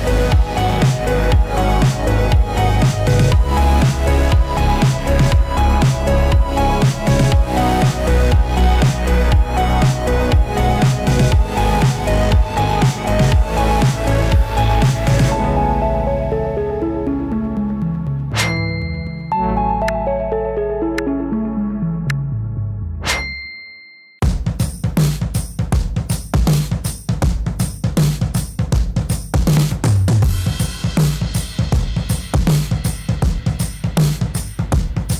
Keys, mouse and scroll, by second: 3.7 space, 8.1-12.4 drag, 12.8-13.6 typing, 14.6 click, 15.5 space, 19.9 space, 22.5-28.1 drag, 28.1 space.